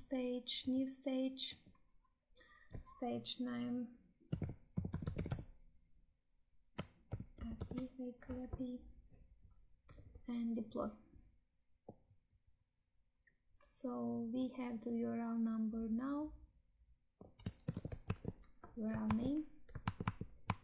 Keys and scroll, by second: 17.5 ctrl+c, 18.1 Tab, 19.8 alt+Tab.